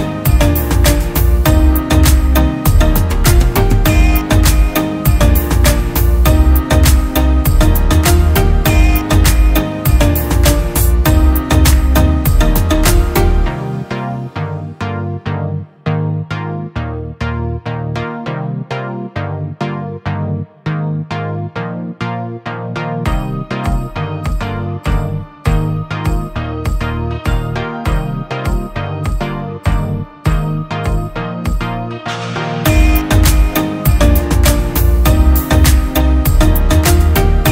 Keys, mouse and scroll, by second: 2.2 Return, 11.4 double click, 14.1 scroll down 1, 23.5 [, 26.4 typing, 35.9 typing, 36.2 ctrl+-, 36.4 ctrl+-.